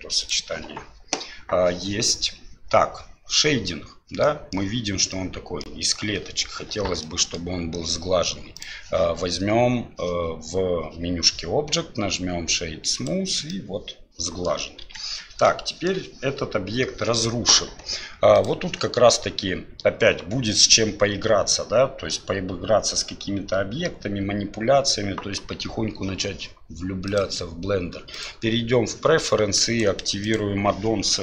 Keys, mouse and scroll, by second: 4.2 middle drag, 5.1-5.7 middle drag, 7.0 middle click, 8.7-13.1 drag, 13.5-14.4 middle drag, 14.8 KP_1, 15.7 middle drag, 18.4-26.2 drag, 27.0-29.1 drag.